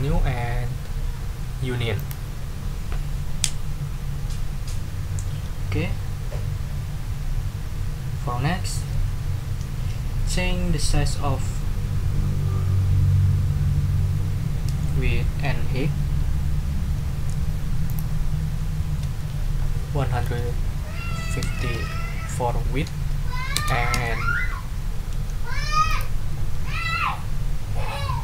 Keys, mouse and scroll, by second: 1.9 click, 17.9 click, 19.0 ctrl+a, 20.2 1, 21.4 5, 21.7 0, 23.5 Return, 23.9 Tab, 25.9 ctrl+click, 26.3 ctrl+a.